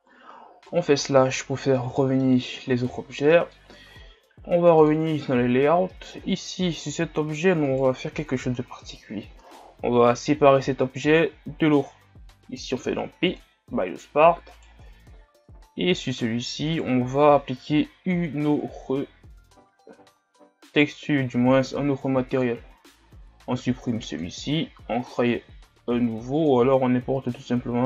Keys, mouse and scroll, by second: 0.8 KP_Divide, 2.0-2.6 middle drag, 2.6-2.9 scroll down 2, 2.9-3.7 scroll up 4, 3.3 middle click, 4.9 click, 5.9 middle click, 6.2 Tab, 6.8-8.7 right drag, 8.7 l, 13.4 p, 14.1 Tab, 14.6 right click, 15.1 Tab, 15.7 Tab, 16.1-18.4 right drag, 22.7 click, 24.2-27.8 drag.